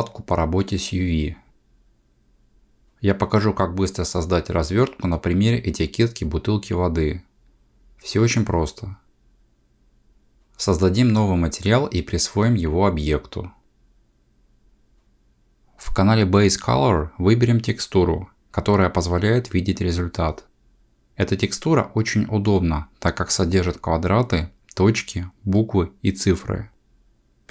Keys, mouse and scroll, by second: 2.3 click, 18.2 click, 21.7 click.